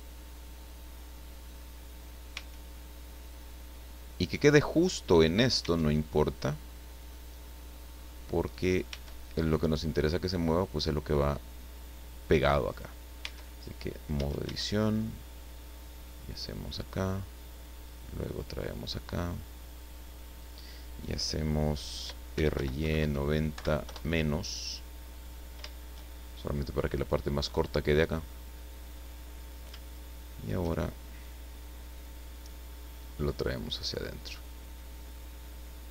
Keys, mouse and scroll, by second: 0.8 scroll up 1, 1.5 scroll down 1, 2.3 Tab, 2.7-5.1 middle drag, 5.6 Tab, 6.9-9.0 drag, 8.9 Tab, 11.5-11.8 scroll down 1, 12.7 right click, 13.2 Tab, 13.8 scroll down 1, 14.1 a, 15.5-16.9 drag, 17.3 click, 18.2-20.6 drag, 22.3 r, 22.5 y, 22.8 KP_9, 23.0 KP_0, 23.5 KP_Subtract, 23.8 KP_Enter, 25.1-25.5 scroll up 1, 27.6-29.2 drag, 29.3-29.7 scroll up 1, 29.8 shift+middle click, 32.3-34.1 drag, 34.9-35.9 drag.